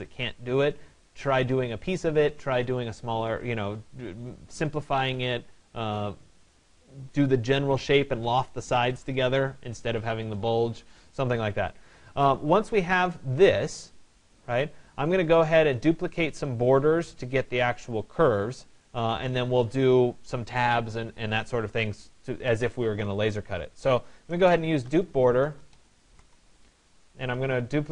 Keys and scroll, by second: 25.4 r.